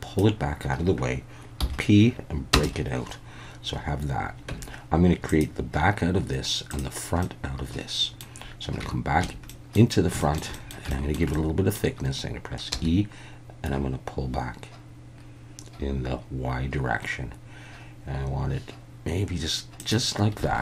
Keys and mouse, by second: 1.6 p, 4.5 Tab, 5.3 click, 6.7 click, 7.2-8.2 middle drag, 8.8 Tab, 9.2 a, 9.5 middle click, 10.3 shift+middle click, 10.5 middle click, 10.9 shift+middle click, 11.3 middle click, 12.7 e, 19.8 click, 20.5 alt+a.